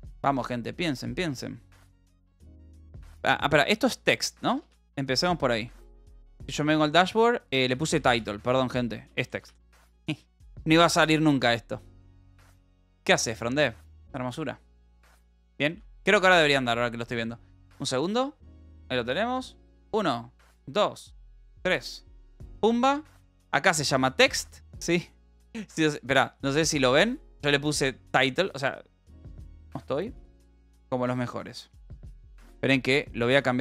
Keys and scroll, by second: 4.7 d, 5.2 s, 6.0 Up, 6.4 Return, 7.3-9.7 typing, 10.0 ctrl+s, 16.8 ctrl+r.